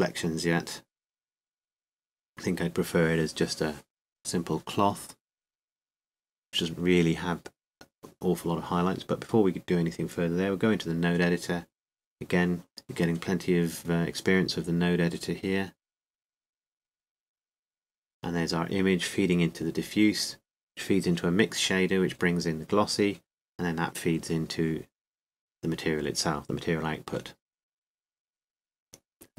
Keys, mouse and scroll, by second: 8.1-9.4 drag, 9.6 click.